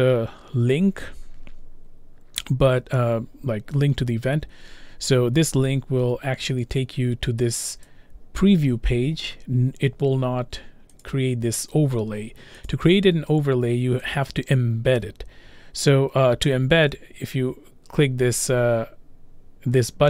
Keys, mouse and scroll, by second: 7.9 click, 9.7-10.9 drag, 12.7 click, 14.2 click.